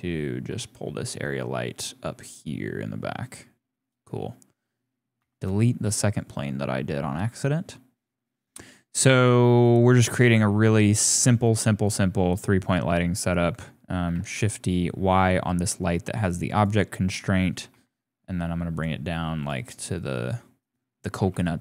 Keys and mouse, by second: 0.4 g, 3.5 click, 5.2 x, 6.0-7.3 drag, 9.2 click, 11.8 click, 13.1 click, 14.2 shift+d, 16.8 click, 17.7 g, 19.8 g, 21.2 g.